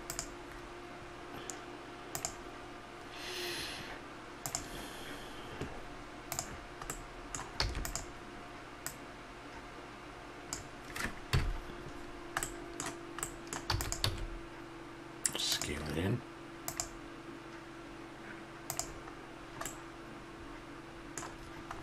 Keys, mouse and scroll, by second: 2.1-4.1 drag, 6.9-8.8 middle drag, 7.6 e, 8.8-10.8 drag, 11.3 KP_Decimal, 13.7 e, 14.1 s, 19.4 middle click, 20.3-21.8 middle drag.